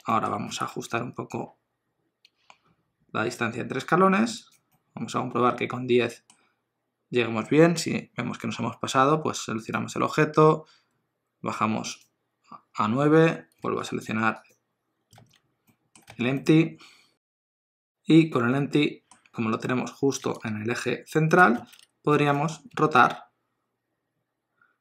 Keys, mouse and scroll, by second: 0.1 shift+middle click, 0.4 scroll down 1, 0.5 g, 4.7 middle click, 9.6 click, 13.6 alt+z, 14.4 click, 15.2 alt+z, 15.7 middle click, 16.1 alt+z, 16.4 middle click, 22.1 alt+z, 22.3 middle click, 22.7 r.